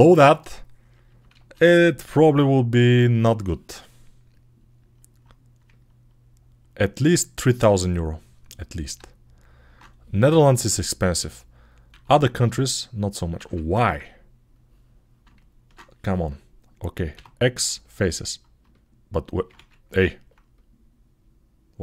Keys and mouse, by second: 1.2 alt+z, 3.1-17.7 drag, 11.7 x, 13.2 ctrl+z, 17.0 x, 19.4 ctrl+z, 20.0 click, 20.4-21.8 middle drag.